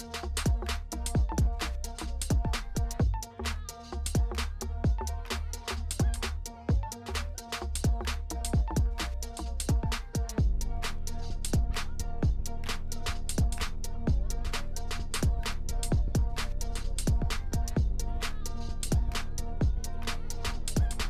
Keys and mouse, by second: 0.8 ctrl+shift+click, 1.8 middle click, 3.0 middle click, 3.4 middle click, 4.0-5.3 drag, 5.8-6.9 drag, 7.8 ctrl+s, 9.0 middle click, 9.3 middle click, 10.4 middle click, 11.6-12.7 drag, 13.9 middle click, 14.9 middle click, 15.4 middle click, 16.0 middle click, 16.9 middle click, 17.6 middle click, 18.1 middle click, 19.0 middle click, 20.2 middle click.